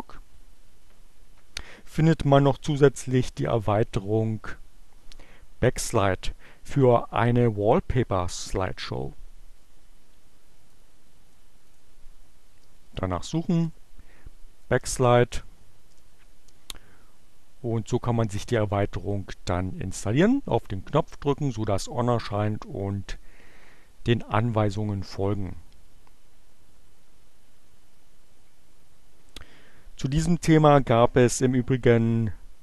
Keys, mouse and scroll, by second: 10.7 click, 11.6 click, 12.5-13.9 typing, 15.3 e, 15.8 Return, 18.0 click.